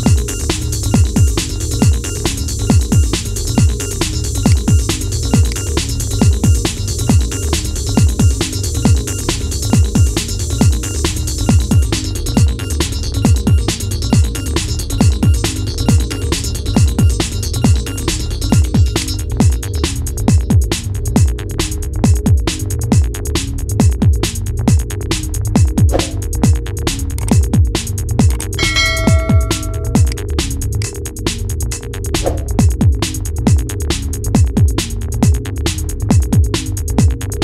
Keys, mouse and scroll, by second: 0.9-2.0 scroll up 2, 2.0 g, 4.2 click, 4.5-5.2 scroll down 2, 5.2 click, 7.0-8.0 scroll up 2, 9.1 g, 16.3-18.7 scroll up 4, 18.7-21.7 drag, 25.4-26.2 scroll down 5, 26.2-26.6 scroll up 1, 27.1 g, 30.1-30.6 scroll down 4, 30.6 click, 30.9-31.6 middle drag, 31.6-32.0 scroll up 3, 32.4-33.4 shift+middle drag, 33.4-33.8 scroll down 5, 33.8-34.5 middle drag, 34.5 scroll up 4, 34.8-36.8 middle drag, 36.8 scroll down 1.